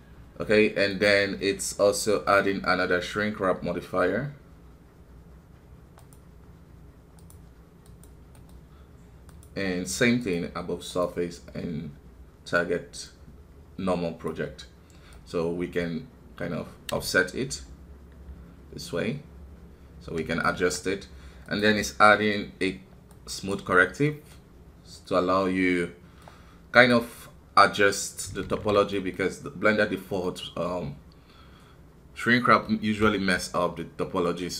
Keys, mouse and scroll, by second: 0.9-3.9 drag, 7.2-8.3 drag, 8.3-10.9 middle drag, 10.9-28.4 drag, 28.4 alt+w, 28.9-34.5 middle drag.